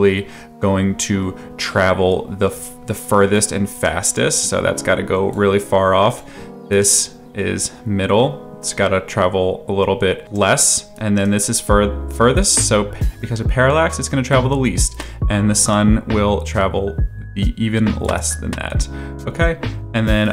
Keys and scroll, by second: 2.5 space.